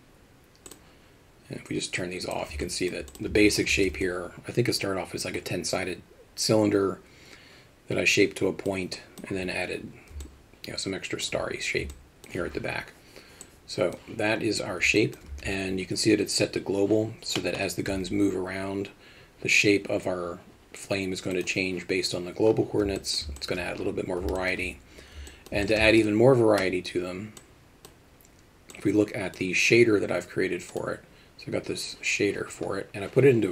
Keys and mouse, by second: 0.7 click, 2.0-2.4 drag, 2.7 alt+middle drag, 3.1 click, 3.3 Tab, 3.8 alt+a, 4.1-8.7 alt+middle drag, 9.0 alt+middle click, 10.3-11.3 alt+middle drag, 11.9 alt+middle click, 13.5 click, 15.0 middle click, 15.3 Tab, 17.4 middle click, 17.9 g, 23.0 middle drag, 23.4 alt+shift+middle drag, 24.4 alt+shift+middle click, 25.3 alt+middle click, 25.7 alt+shift+middle click, 27.5 click, 28.8 click.